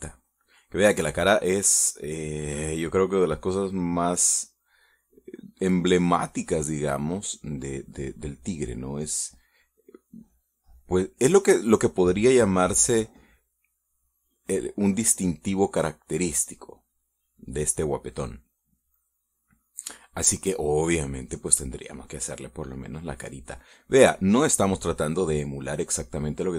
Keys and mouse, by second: 0.7-3.1 drag, 3.5 click, 4.5 click, 7.1-8.9 drag, 10.7 click, 11.7 middle click, 13.4-15.3 drag, 17.9-20.7 drag, 22.0-24.3 drag, 24.4 middle click, 25.1 middle click, 26.2-26.5 drag.